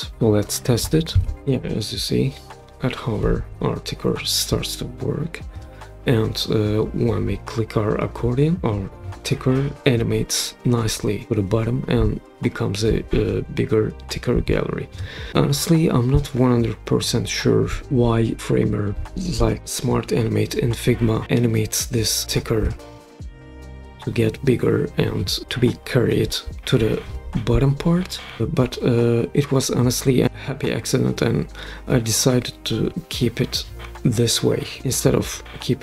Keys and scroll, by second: 1.1 super+p.